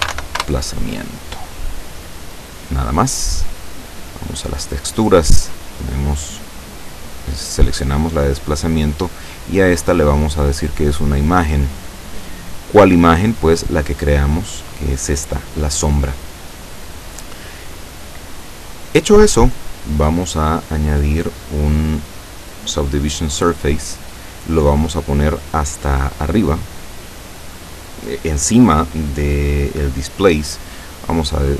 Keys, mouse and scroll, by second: 0.0-0.7 typing, 4.3 click, 6.1 click, 7.3 click, 8.4 click, 10.9 click, 12.8 click, 13.9 click, 19.1 click, 21.1 click, 22.7 click, 23.8-24.7 scroll down 1, 27.3 click.